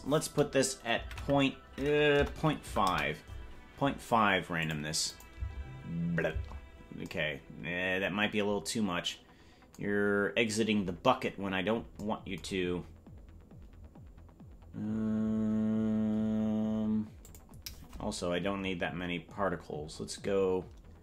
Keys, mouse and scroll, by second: 4.7 click, 5.1 click, 5.3 space, 6.4 space, 17.2-21.0 drag.